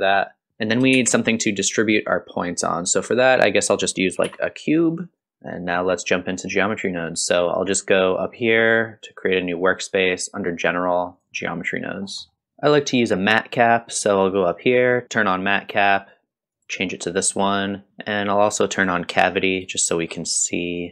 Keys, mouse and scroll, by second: 0.5 scroll up 1, 0.5 shift+a, 0.9 shift+a, 5.2 shift+middle click, 5.2 click, 5.2 scroll up 2, 12.4 middle click, 13.6-20.9 drag.